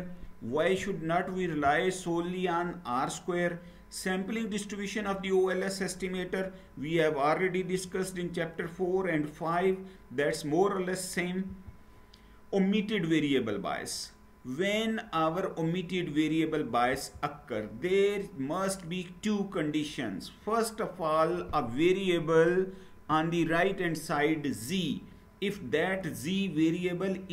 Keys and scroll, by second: 11.5 Down, 16.9 Down.